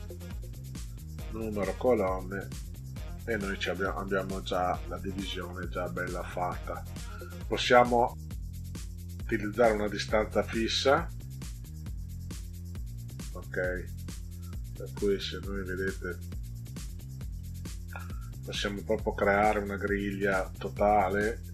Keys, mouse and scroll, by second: 1.7 click, 9.6 click, 11.9 click, 14.8 click, 15.7 click, 15.9 click, 16.1 click, 16.3 click, 16.5 click, 16.7 click, 17.1 click, 17.3 click.